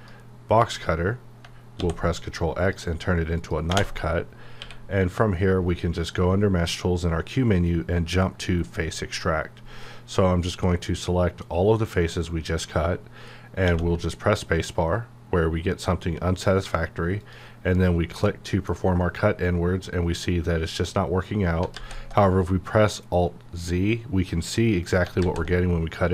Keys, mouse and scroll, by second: 1.8 ctrl+x, 2.7 click, 3.7 space, 7.6-13.6 drag, 13.6 space, 13.6 _, 17.2 click, 18.3-21.7 middle drag, 21.6 alt+Num_Lock, 21.7 alt+z.